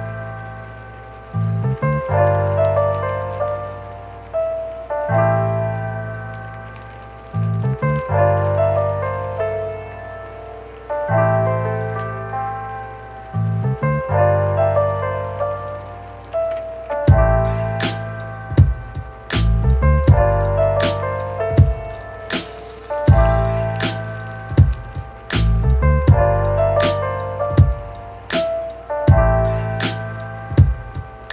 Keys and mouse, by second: 0.0-0.4 typing, 0.9 Tab, 1.0 middle click, 1.2 Tab, 1.7 Tab, 2.2 middle click, 2.8 Tab, 2.9 middle click, 3.1 middle click, 3.2 Tab, 3.4 middle click, 3.9 shift+middle click, 4.2-7.5 typing, 4.3 ctrl+z, 4.3 middle click, 4.4 middle click, 4.5 click, 5.1 click, 5.1 ctrl+z, 5.4 middle click, 5.6 shift+middle click, 5.9 shift+middle click, 6.1 click, 6.1 middle click, 6.7 click, 7.5 click, 7.5 shift+middle click, 9.2 click, 9.6 click, 10.0 click, 10.4-11.4 drag, 11.4 middle click, 11.8-15.8 typing, 12.4 ctrl+z, 13.4 ctrl+z, 13.7 shift+click, 13.9 shift+middle click, 14.2 click, 14.5 click, 14.7 shift+click, 15.0 middle click, 15.3 shift+click, 15.9 KP_Divide, 16.6 click, 16.8 shift+e, 16.9 f, 17.0 shift+click, 17.2 shift+middle click, 17.4 middle click, 17.7 middle click, 18.8 click, 19.4 click, 19.7 e, 20.0 click, 20.5 middle click, 20.9-31.1 typing, 21.0 click, 21.4 click, 21.5 click, 21.7 ctrl+z, 21.9 click, 22.2 middle click, 22.4 ctrl+z, 22.5 ctrl+z, 22.5 shift+click, 23.0 right click, 23.2 shift+click, 23.4 click, 23.7 shift+click, 23.8 shift+middle click, 24.5 click, 25.0 shift+click, 25.2 shift+middle click, 25.4 shift+click, 26.2 shift+click, 26.6 shift+click, 26.8 shift+click, 27.4 click, 28.2 click, 28.7 KP_Divide, 29.0 KP_Divide, 29.7 ctrl+a, 29.7 shift+middle click, 29.9 click, 30.0 click, 30.2 shift+click, 30.4 middle click, 30.6 middle click, 30.8 shift+click.